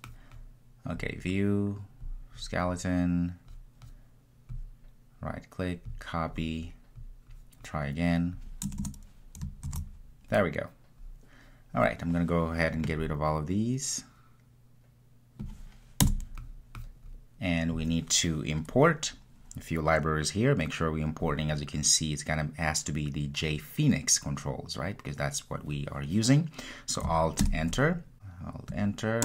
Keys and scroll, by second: 9.8 super+v, 27.5 alt+Return.